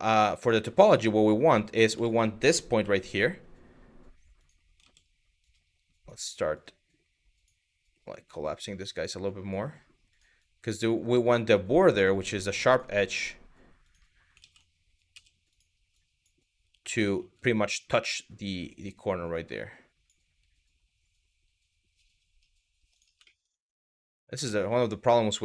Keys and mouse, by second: 0.2 1, 0.7 click, 1.7 shift+middle click, 4.0 click, 4.4 ctrl+z, 5.2 click, 6.3 click, 7.7 g, 8.3 click, 8.7 click, 9.2 g, 9.7 click, 10.1 click, 11.5 click, 12.3 click, 12.5 g, 13.4 click, 14.0 ctrl+z, 14.8 z, 15.7 click, 16.8 g, 18.3 click, 19.1 click, 19.9 g, 22.6 click, 23.0 shift+middle click, 24.2 shift+middle click, 25.1 click.